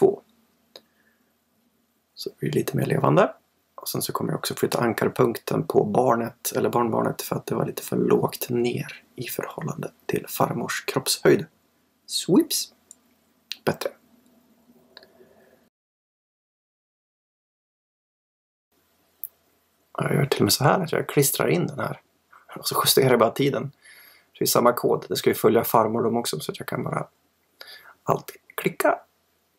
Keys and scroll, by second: 18.3 super+c, 19.9 super+v, 26.9 super+v.